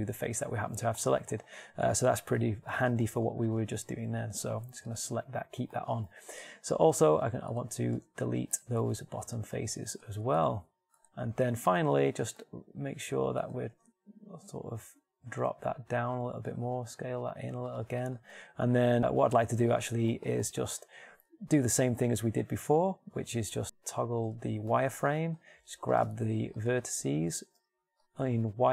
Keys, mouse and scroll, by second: 4.3 ctrl+r, 6.8 middle click, 8.5 ctrl+Tab, 11.7 x, 14.1 g, 17.3 s, 24.1 middle click, 25.0 z, 26.2 ctrl+Tab, 28.1 b.